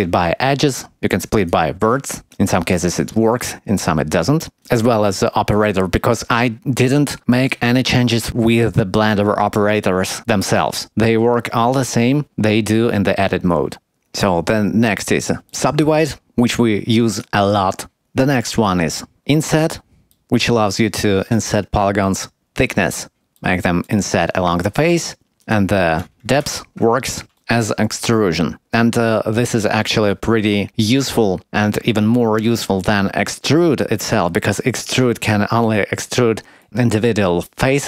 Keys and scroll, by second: 0.6 g, 2.2 g.